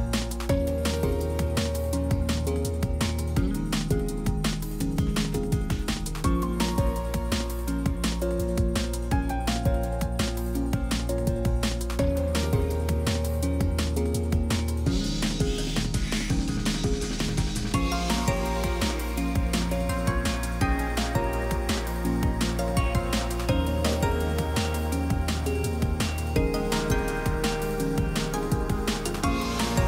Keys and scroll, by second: 20.6 Return, 22.2 Return, 28.8 F5.